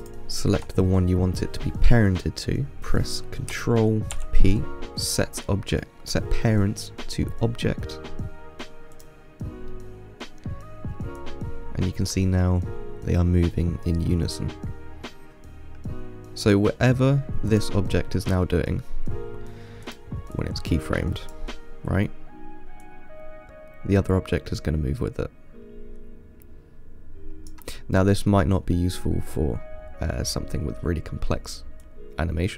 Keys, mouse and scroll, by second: 0.3 shift+click, 2.8 p, 4.4 ctrl+p, 10.0-11.4 middle drag, 11.4-14.5 drag, 17.2-17.8 middle drag, 17.8 click, 18.2-20.1 middle drag, 20.1-22.1 drag, 22.1-23.1 scroll down 2, 23.1 click, 28.0-28.9 middle drag, 28.9-32.0 scroll up 2, 32.1 click.